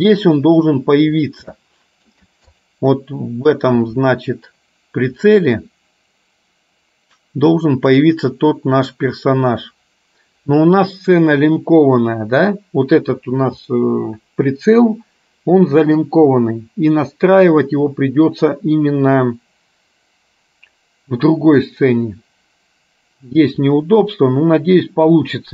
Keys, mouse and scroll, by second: 1.8 shift+middle click, 2.5 click.